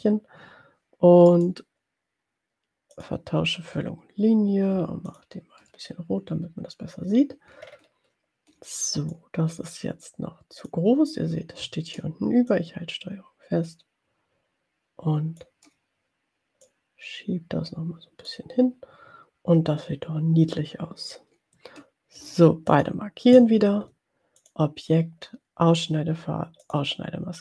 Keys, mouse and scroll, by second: 1.2 right click, 3.2 click, 5.3 shift+click, 7.7-8.4 ctrl+scroll up 2, 9.4-10.9 drag, 12.7-15.8 ctrl+drag, 17.3-18.9 drag, 23.0 shift+click, 23.4 shift+click, 24.5 click, 27.1 click.